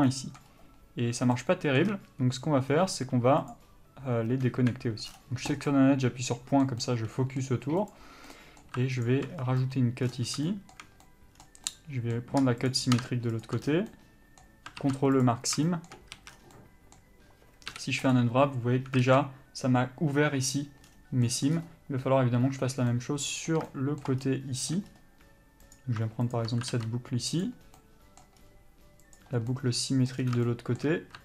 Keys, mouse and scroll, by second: 0.6-1.5 scroll up 1, 1.5 shift+middle click, 2.1-2.6 shift+scroll down 1, 2.6 scroll up 1, 2.9-3.6 scroll down 1, 3.6 click, 4.7 KP_Decimal, 5.2-5.8 scroll down 1, 5.8 middle click, 8.0 click, 8.5 middle click, 9.2 ctrl+click, 9.5 scroll down 1, 9.8 middle click, 10.3-10.6 scroll down 1, 10.6 shift+middle click, 11.6 scroll down 1, 11.8 middle click, 12.8 shift+click, 13.6 ctrl+click, 13.8 scroll down 1, 14.1 middle click, 15.4 ctrl+e, 15.8 shift+middle click, 16.3 a, 16.5 scroll down 1, 16.7 middle click, 18.3 u, 19.2 alt+a, 23.1 middle click, 24.4-24.9 scroll up 1, 24.9 middle click, 25.0-25.8 scroll up 1, 25.8 click, 26.5 ctrl+click, 27.6 ctrl+e, 27.8 scroll down 1, 28.0 middle click, 28.6-29.2 scroll up 1, 29.2 click, 29.7 middle click, 30.3 scroll down 1, 30.6 shift+middle click.